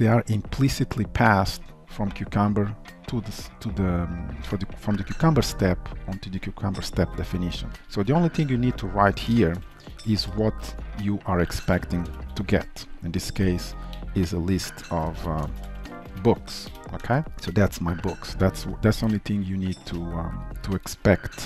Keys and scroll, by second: 15.2 ctrl+shift+Left, 18.5 alt+Return, 20.5 ctrl+s, 20.9 alt+1.